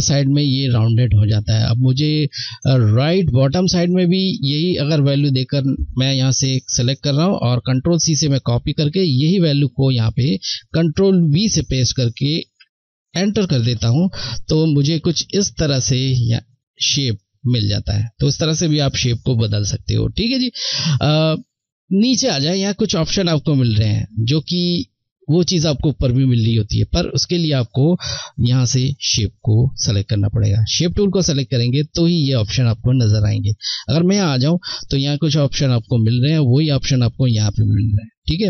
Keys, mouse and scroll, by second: 4.9 click, 6.9 ctrl+c, 8.7 click, 10.9 ctrl+v, 16.3 click, 17.3 click, 28.5 click, 33.5 click.